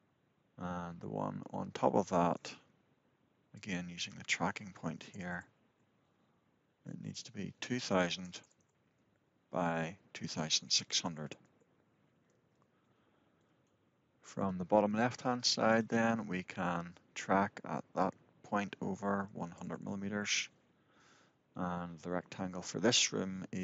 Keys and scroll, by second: 5.4 Return, 9.3 Return, 11.2 Return, 13.3 Return, 19.9 Return.